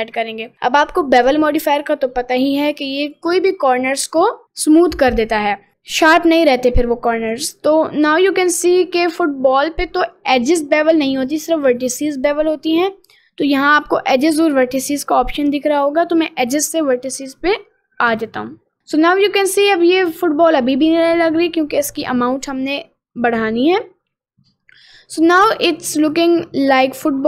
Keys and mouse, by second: 7.1 middle click, 7.5 middle click, 8.3 middle click, 9.1 middle click, 9.7 middle click, 18.2 click, 19.0 middle click, 20.1 middle click, 20.7 middle click, 23.7-25.5 drag, 26.1-27.2 middle drag.